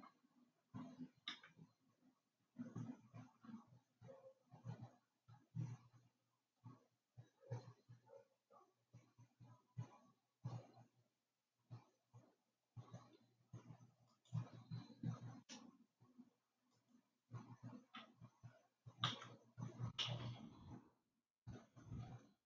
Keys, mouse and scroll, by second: 1.7 g, 17.4 alt+click, 19.6 g.